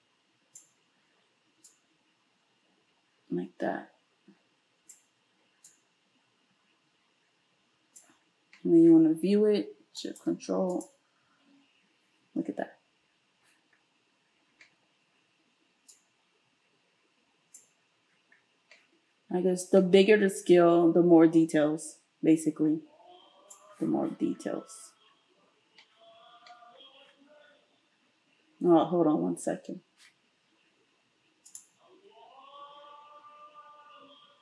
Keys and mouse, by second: 10.9-15.9 ctrl+shift+middle drag, 15.9-34.4 drag.